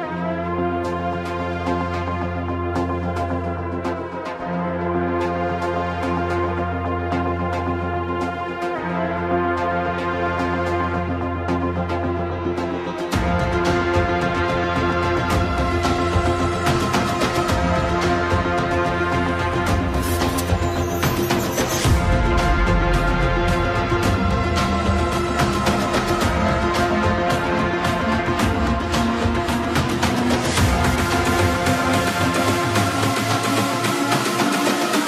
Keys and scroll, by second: 0.0 BackSpace, 1.9 Return, 18.9 Return.